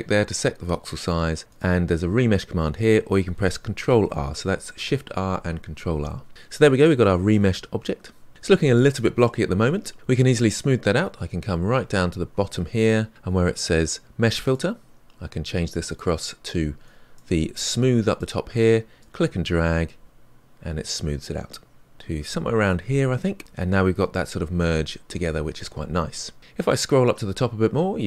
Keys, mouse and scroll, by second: 4.0 ctrl+r, 6.0-8.3 middle drag, 14.5-19.2 drag, 22.7-28.0 middle drag.